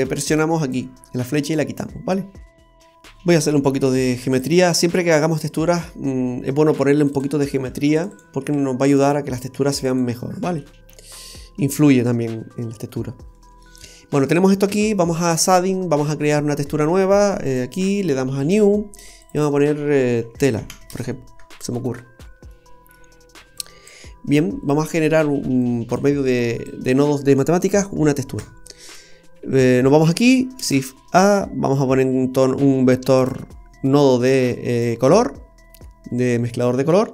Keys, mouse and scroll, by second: 0.6 click, 1.7-2.1 scroll down 2, 2.8 scroll down 3, 3.5 ctrl+r, 6.7 ctrl+r, 10.3 scroll down 1, 10.6 middle click, 11.4-11.8 scroll up 2, 11.8 middle click, 13.0-13.3 scroll down 1, 13.3 middle click, 14.6 Tab, 15.5 click, 16.0 scroll down 1, 16.7-17.0 scroll down 3, 17.4 click, 21.8-22.6 scroll up 7, 22.5 middle click, 23.6 click, 24.3 click, 24.9 right click, 25.6 click, 26.4 click, 29.1-29.6 scroll up 4, 29.9 middle click, 30.6 shift+a, 33.7 click, 35.3-35.7 scroll up 4, 35.8 middle click.